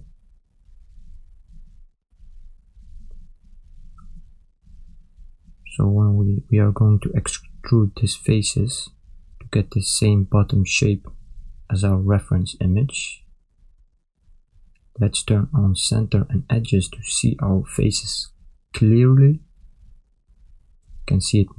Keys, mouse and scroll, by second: 0.4 shift+click, 1.7 ctrl+click, 2.6 shift+click, 3.4 ctrl+click, 4.3 shift+click, 5.0 ctrl+click, 5.7 shift+click, 6.6 ctrl+click, 7.8 shift+click, 8.9 ctrl+click, 9.8 shift+click, 10.6 ctrl+click, 14.2 click, 18.7 ctrl+middle click.